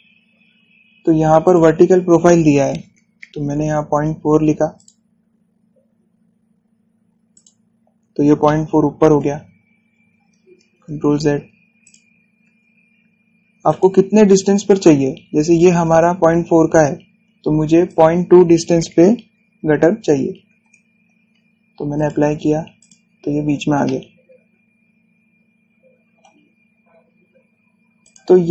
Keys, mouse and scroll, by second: 2.1 click, 4.1 Return, 5.4 click, 8.0 click, 8.5-9.1 scroll down 1, 9.1-10.3 middle drag, 10.3 scroll up 1, 11.5 ctrl+z, 12.5 click, 13.1 ctrl+z, 14.3 click, 14.8-15.9 scroll up 1, 17.3-17.7 scroll down 1, 18.5 click, 21.3 Return, 22.6 click, 23.8 scroll down 1, 24.5-28.5 shift+middle drag.